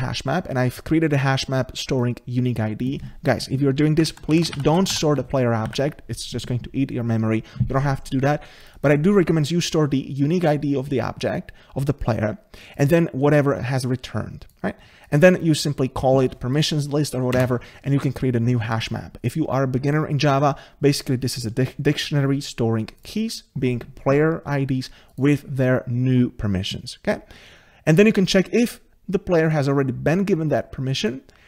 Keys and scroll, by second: 5.7 ctrl+z.